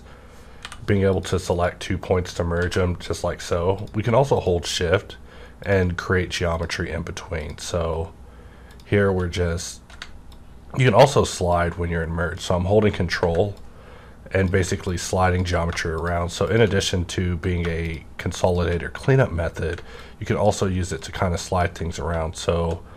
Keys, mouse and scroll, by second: 0.6 m, 1.1 click, 2.6 ctrl+z, 4.4 shift+click, 11.5-16.0 ctrl+drag, 16.0 shift+click, 18.5 shift+click, 21.0-22.9 ctrl+drag.